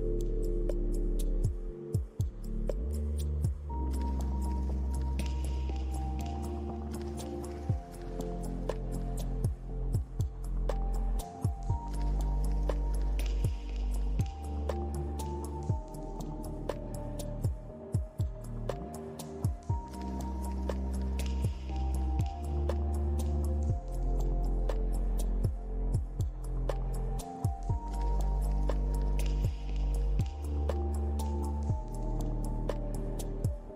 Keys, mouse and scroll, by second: 0.5 scroll up 1, 1.0 middle click, 1.9 scroll down 2, 3.7 middle click, 3.7 scroll down 2, 4.8 scroll up 1, 5.1 middle click, 8.8 r, 10.4 scroll down 2, 10.8 middle click, 13.6 click, 14.4-14.8 scroll down 2, 14.8 middle click, 15.5-16.3 scroll up 4, 16.3 click, 16.6-17.1 scroll up 2, 17.7 scroll down 2, 18.8 middle click, 19.9 r, 22.7 g, 24.2 middle click, 25.0 middle click, 25.8 scroll up 2, 26.3 g, 27.7 scroll down 2, 28.5 click, 30.4 Tab, 30.8 scroll down 1, 31.1 middle click, 31.9-32.4 scroll up 2, 32.7 click.